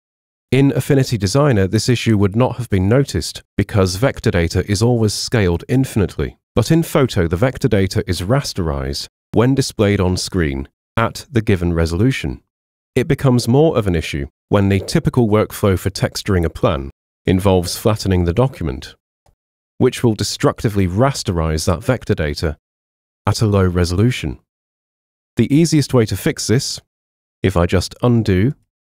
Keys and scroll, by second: 22.8 super+1.